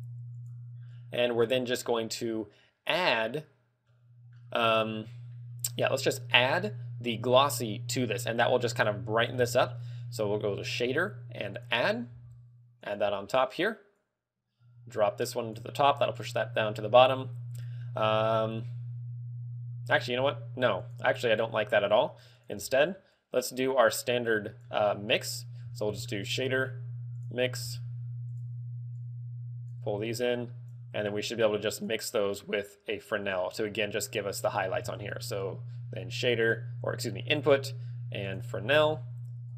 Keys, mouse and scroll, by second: 0.6 click, 1.2 click, 4.0 middle click, 9.5 shift+a, 12.4 g, 13.4 click, 14.2 click, 17.7 middle click, 21.0 click, 22.5 click, 22.8 x, 23.3 click, 25.1 middle click, 25.9 shift+a, 27.9 g, 28.5 click, 29.1 click, 30.3 click, 31.5 click, 32.5 click, 33.9 click, 34.9 shift+a, 38.9 g.